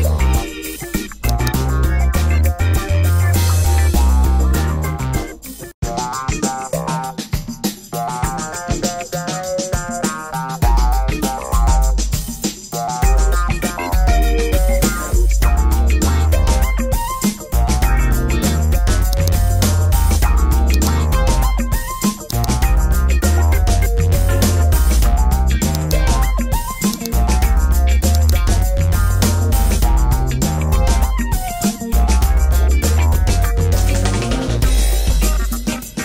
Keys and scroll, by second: 3.1 Tab, 4.2 BackSpace, 4.7 6, 5.0 Return.